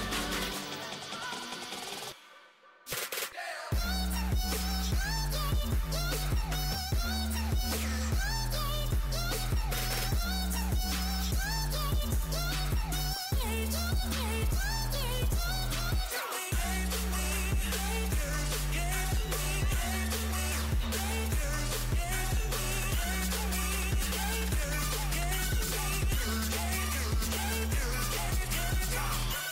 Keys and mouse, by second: 0.5-1.9 middle drag, 3.7 z, 4.2 Tab, 4.4 a, 4.9 a, 5.6 s, 9.7 z, 12.4 s, 17.6 right click, 19.0 x, 21.9-24.3 drag, 23.5-25.7 right drag, 24.3 s, 26.4 KP_1, 28.3-29.5 drag.